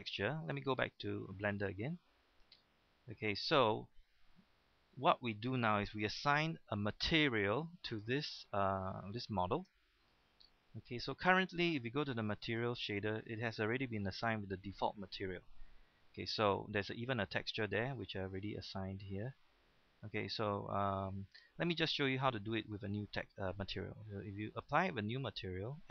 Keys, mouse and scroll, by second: 4.6 middle click, 6.5 Tab, 7.9-9.6 middle drag, 9.6 Tab, 10.6 middle click, 12.4 click, 17.7 middle click, 24.5 click.